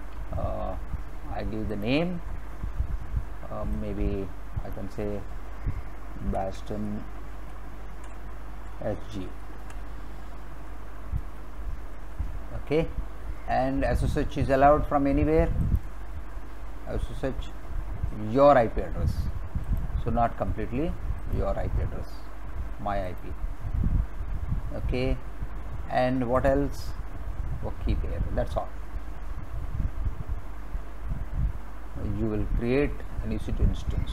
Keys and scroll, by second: 5.9-9.6 typing.